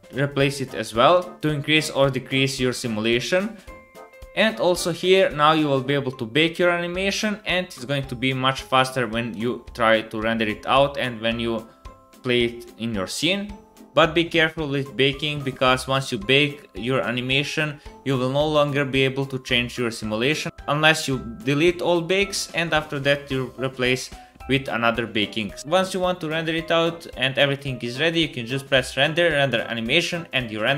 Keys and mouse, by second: 1.3-5.7 middle drag, 7.9 space.